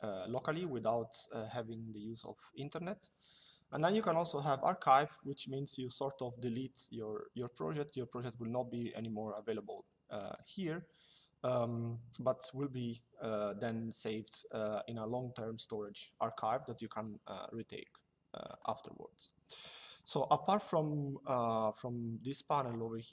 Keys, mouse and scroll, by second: 18.2 click.